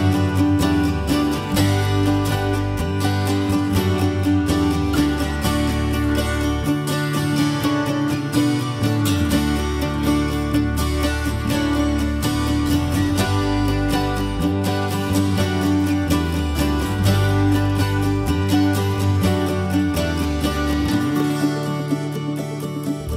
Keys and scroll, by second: 1.6 m, 5.0 Escape, 9.4 i, 14.2 p, 15.6 space, 16.5 ctrl+g, 17.9 m, 20.0 m.